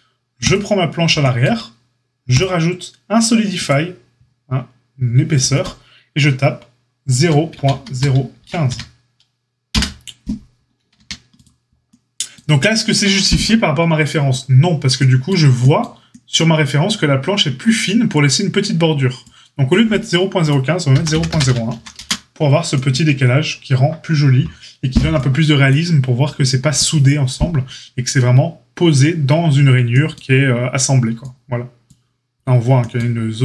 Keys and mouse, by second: 0.5-2.4 middle drag, 2.4-33.4 drag, 10.9 a.